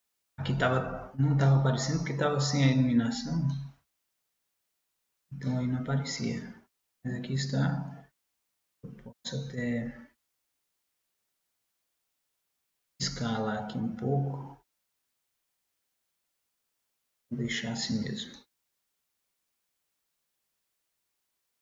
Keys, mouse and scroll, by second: 2.5 middle click, 4.8-5.9 middle drag, 6.5-9.5 middle drag, 9.5 Tab, 12.3 s, 18.5-20.6 middle drag.